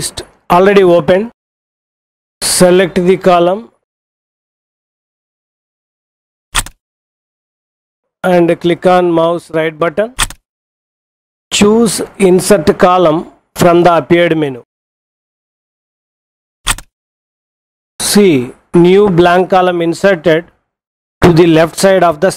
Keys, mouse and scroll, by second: 6.6 click, 10.2 right click, 16.5 click.